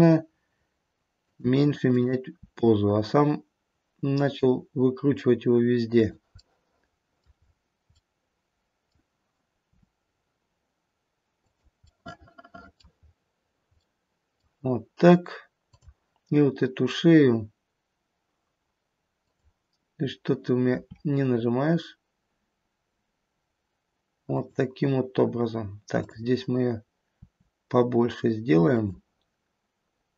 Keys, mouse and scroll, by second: 1.8 click, 2.6 r, 6.6 middle click, 6.9 middle click, 7.5 middle click, 7.5-8.2 scroll down 4, 8.2 middle click, 9.6 r, 11.8 middle click, 11.8 scroll up 1, 12.0 middle click, 12.6 middle click, 13.0-13.4 scroll down 2, 13.8 middle click, 15.7 click, 19.2 click, 20.7 r, 26.0 click, 27.1 r.